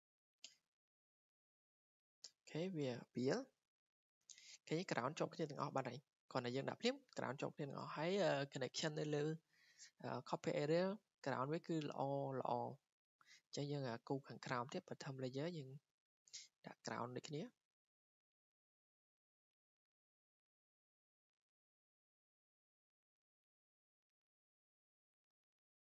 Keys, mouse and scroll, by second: 1.6 right click, 3.7-4.0 scroll, 4.0 scroll down 9, 4.7 scroll up 3, 6.1 scroll, 8.1 click, 8.1-8.4 scroll down 9, 10.6 click, 12.9 click, 13.6 click, 15.3 click, 16.5 click, 17.2-17.5 scroll down 4, 19.0 scroll, 19.3-19.9 drag, 19.9-21.2 middle drag, 19.9 scroll, 20.7-21.1 scroll, 23.2 click, 23.3-24.0 scroll down 8, 24.5 scroll down 2, 25.1 scroll.